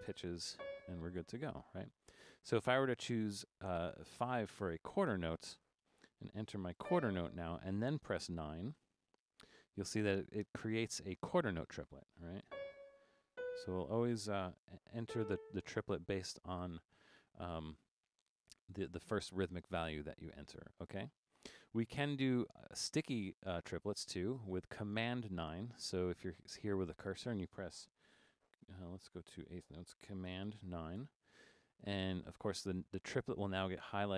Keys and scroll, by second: 0.0-1.0 typing, 4.1 5, 6.8 d, 8.8 9, 12.5-13.8 typing, 15.1 a, 29.0 4, 31.0 super+9.